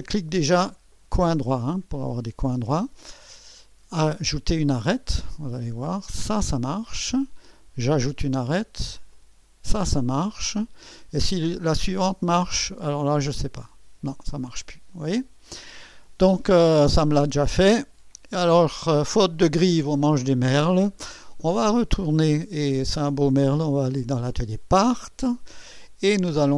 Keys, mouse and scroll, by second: 0.0-1.8 drag, 4.2-5.4 drag, 6.1-7.2 drag, 7.9-9.9 drag, 11.5 click, 13.4-14.4 drag, 17.1-18.1 drag, 22.5 click, 23.6 click.